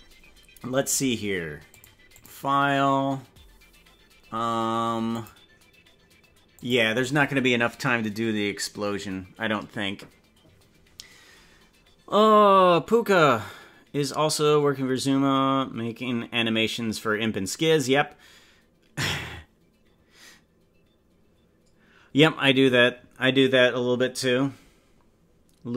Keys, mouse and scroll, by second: 1.7 click, 2.1-4.3 drag, 5.1-6.6 drag.